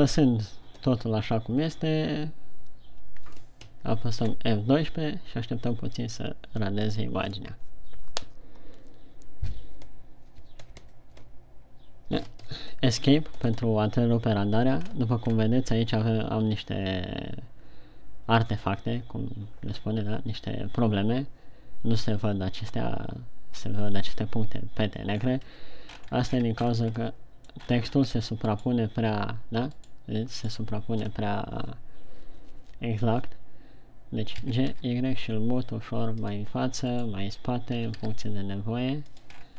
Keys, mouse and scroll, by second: 25.9 Escape, 25.9 scroll down 4, 26.3 scroll up 3, 27.2 shift+scroll down 1, 27.7 middle click, 28.2-28.7 scroll up 2, 28.8 scroll up 2, 29.2 right click, 30.2 right click, 30.8 right click, 35.0 g, 37.0 click, 37.5 right click, 38.2 g.